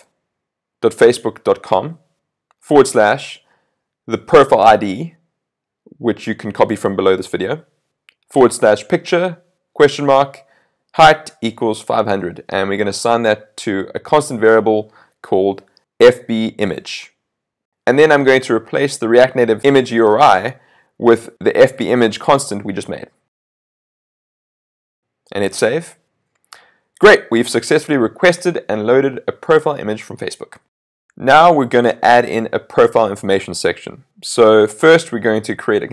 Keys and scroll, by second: 4.1 super+v, 19.9 super+c, 23.5 super+v, 26.7 super+s.